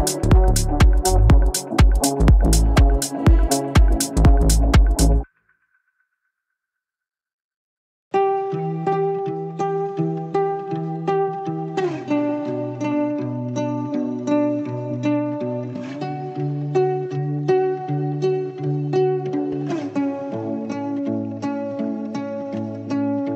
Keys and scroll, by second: 10.6 shift+F2, 10.8 Escape, 20.4 ctrl+z.